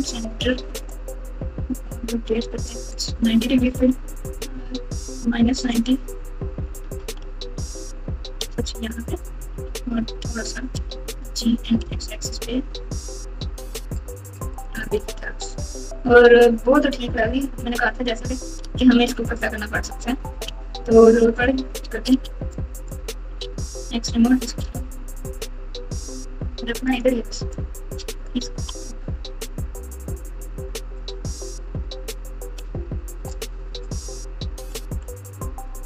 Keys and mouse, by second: 1.7 r, 3.7 r, 6.6 r, 9.5 KP_7, 10.7 g, 18.6 Tab, 19.0 Tab, 19.2 click, 20.4 Tab, 22.0 1, 22.7 click, 23.4 alt+z, 23.6 click, 24.6 g, 27.7 click, 28.7 g, 31.5 click, 31.7 click, 32.6 g.